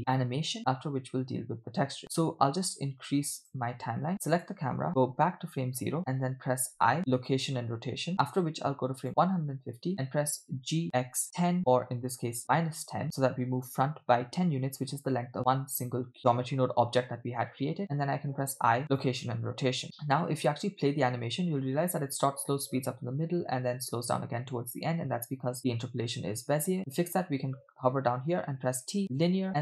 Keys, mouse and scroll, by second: 0.0 click, 0.6-3.6 drag, 4.4 click, 5.1 Left, 6.0 x, 6.7 i, 9.0 click, 10.5 g, 18.4 i, 19.8-20.8 drag, 20.9 space, 25.6 space, 26.8 space, 26.9 space, 28.6 t, 29.5 space.